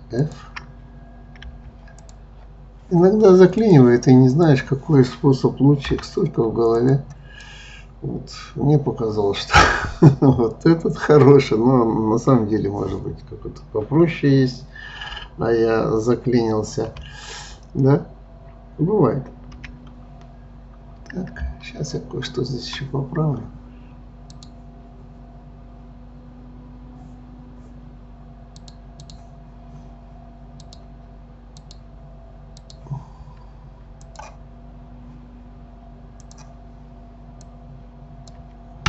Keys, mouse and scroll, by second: 0.2 shift+click, 1.4 f, 2.0 click, 3.6 click, 5.9 Delete, 7.5-13.1 middle drag, 16.9 KP_3, 19.5 KP_1, 20.4-21.6 scroll up 2, 21.9-24.3 shift+middle drag, 24.3 click, 28.6-32.7 drag, 34.0 click, 36.2-37.6 drag.